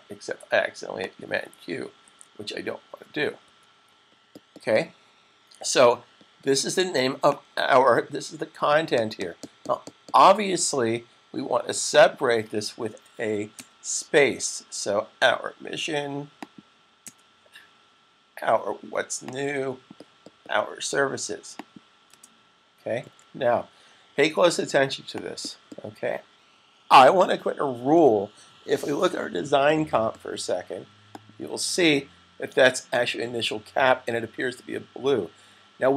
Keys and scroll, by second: 1.8 super+1, 3.3 super+s.